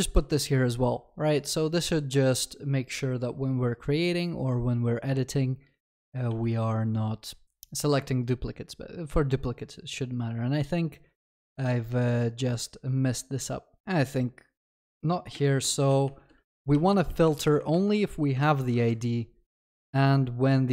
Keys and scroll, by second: 0.1 ctrl+s, 6.3 ctrl+s.